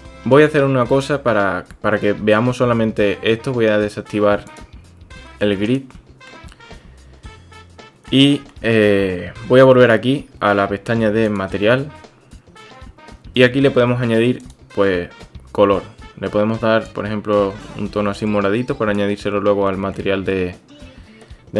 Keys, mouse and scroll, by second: 4.5 middle click, 5.7 middle click, 6.3-8.1 middle drag, 8.5 shift+middle click, 11.3 right click, 14.4 right click, 19.7 right click.